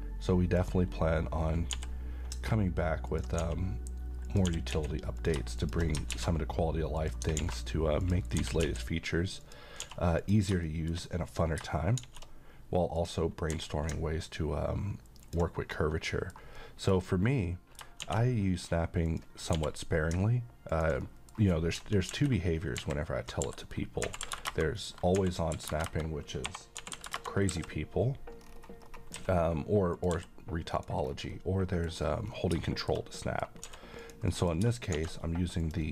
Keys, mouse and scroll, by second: 0.6 click, 1.7 g, 3.1 ctrl+click, 3.4 s, 4.3 click, 4.5 g, 4.7 z, 5.2 click, 5.6 shift+click, 6.1 alt+x, 7.0 click, 7.4 a, 8.1 click, 8.4 g, 8.7 x, 9.5 click, 9.8 s, 10.2 click, 10.7 shift+middle click, 11.5 scroll up 1, 12.0 d, 13.0 click, 13.5 g, 15.3 ctrl+click, 15.7-16.3 middle drag, 18.0 shift+d, 19.1 click, 19.6 g, 20.7 ctrl+click, 21.1 middle click, 24.1 r, 26.8 r, 28.4-28.8 scroll up 1, 29.1 s, 30.0 click, 30.2 g, 30.8 click, 31.1 scroll down 1, 31.4-31.9 middle click, 32.0 scroll down 1, 32.7 middle click, 33.7 s, 34.1 click, 34.3 middle click, 35.0 shift+d, 35.6 click.